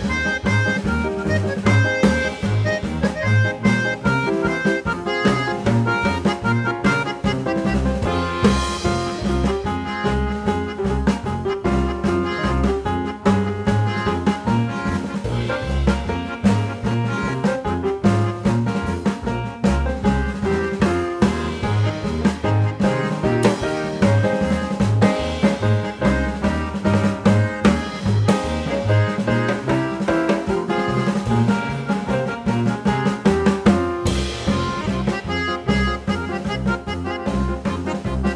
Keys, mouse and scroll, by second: 0.8 click, 1.5 click, 2.7 click, 4.3 click, 6.5 click, 20.0 click, 23.4 click, 24.3 5, 38.2 shift+F1.